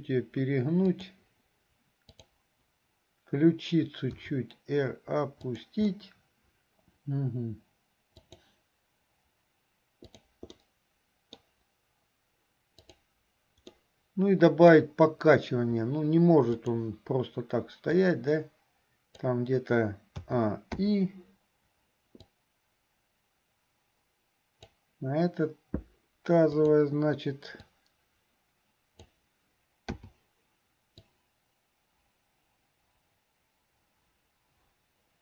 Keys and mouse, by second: 4.1 r, 6.1 click, 6.1 right click, 6.9 g, 10.1 click, 10.8 click, 10.9 right click, 11.2 middle click, 12.9 right click, 14.0-15.0 middle drag, 16.6 click, 18.4-19.6 drag, 20.4 a, 21.1 i, 22.5-24.9 drag, 26.6 click, 28.0-29.4 drag, 31.2-35.2 drag.